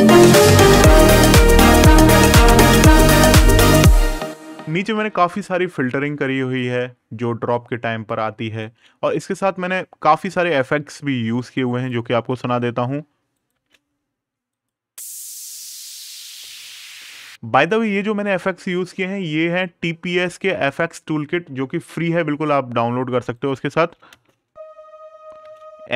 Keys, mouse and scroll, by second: 2.6 scroll down 1, 3.2 space, 3.4-3.9 scroll down 1, 7.8 click, 8.8 scroll up 1, 11.1 click, 13.1 right click, 13.3 space, 14.3 click, 16.6-17.1 scroll, 23.1 right click, 23.9 space.